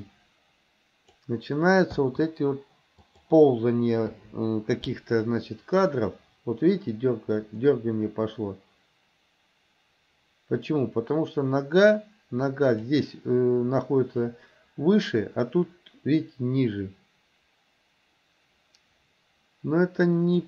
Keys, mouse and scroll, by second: 0.1-1.2 drag, 2.0 i, 3.1 click, 4.2 Delete, 5.4-13.0 drag, 14.3-20.4 drag.